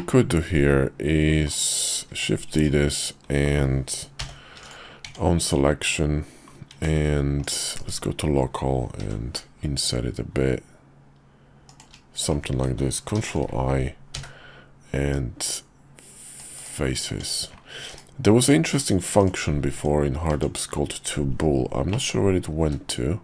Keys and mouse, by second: 2.1 shift+d, 4.2 p, 5.0 Tab, 5.4 click, 6.7 Tab, 7.4 click, 7.7 /, 9.0 i, 13.1 ctrl+i, 14.1 x, 17.1 Tab, 17.9 /, 18.7 click, 19.2 click, 19.7 Tab, 20.3 Tab, 21.9 click, 22.6 q.